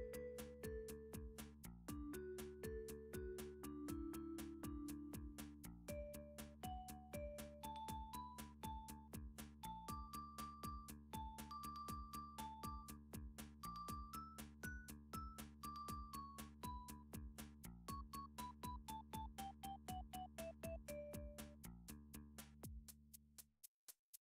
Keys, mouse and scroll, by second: 2.0 z, 2.3 click, 2.8 click, 3.4 shift+click, 4.0 shift+click, 4.0 g, 4.4 z, 5.7 click, 6.2 middle click, 6.2-6.9 scroll, 7.9 alt+click, 8.3 click, 9.0 7, 10.3 middle click, 10.3 r, 11.1 click, 11.8 g, 13.2 click, 14.2 middle click, 14.6 middle click, 14.9 2, 15.9 3, 18.8 s, 22.2 right click, 24.1 7.